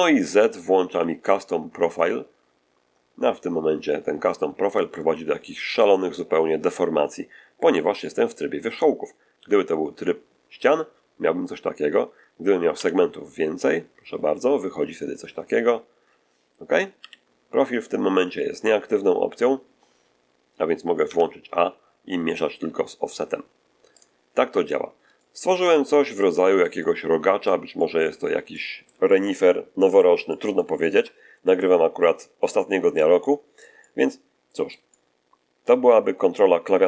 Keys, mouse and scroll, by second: 0.8 z, 9.3 v, 12.6 s, 16.9 p, 21.0 a, 23.9 click, 24.8 scroll down 3, 25.1-27.6 shift+middle drag, 27.7 middle click, 28.4 middle click, 30.2 middle click, 31.8 scroll up 2, 32.5 shift+middle click, 34.3-35.8 middle drag.